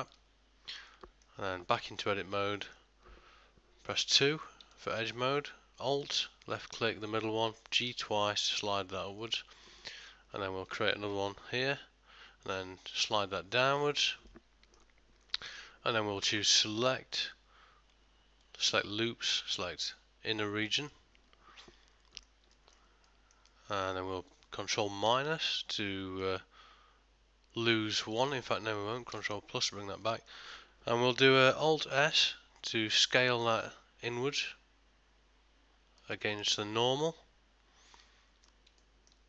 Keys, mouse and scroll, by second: 1.0 middle click, 1.9 Tab, 2.7 ctrl+middle click, 4.0 2, 4.8 ctrl+middle click, 6.5 alt+click, 7.1 middle click, 8.0 g, 9.7 middle click, 11.2 ctrl+r, 14.4 middle click, 17.2 click, 21.7 middle click, 22.6 ctrl+middle click, 23.1 middle click, 23.6 ctrl+middle click, 25.1 ctrl+KP_Subtract, 26.3 middle click, 29.2 ctrl+KP_Add, 30.1 middle click, 32.1 alt+s, 36.5 middle click, 38.9 ctrl+middle click.